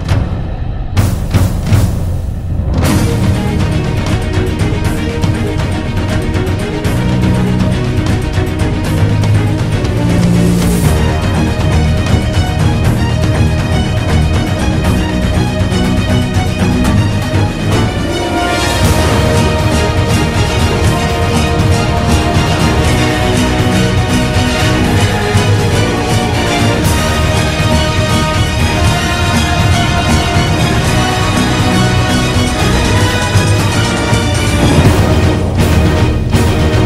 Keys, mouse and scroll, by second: 7.6 ctrl+z, 9.0 ctrl+z, 9.4 right click, 15.9 ctrl+-, 16.9 ctrl+-, 17.4 ctrl+=, 19.9 ctrl+z, 21.0 ctrl+=, 21.1 ctrl+-, 21.7 ctrl+=, 23.2 ctrl+-, 23.3 ctrl+=, 23.4 ctrl+-, 24.0 ctrl+=, 26.6 ctrl+=, 28.4 ctrl+-, 34.7 ctrl+=.